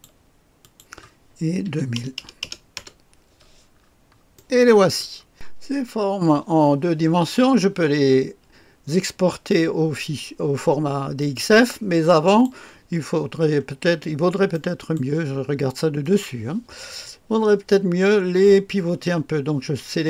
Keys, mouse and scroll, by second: 1.6 KP_2, 1.9 KP_0, 2.2 KP_0, 2.7 Return, 3.7-4.3 scroll down 1, 4.3 right click, 5.3 click, 11.1 click, 12.2 click, 13.3-14.5 scroll up 1, 14.5 right click, 14.8 scroll up 1, 16.0 click.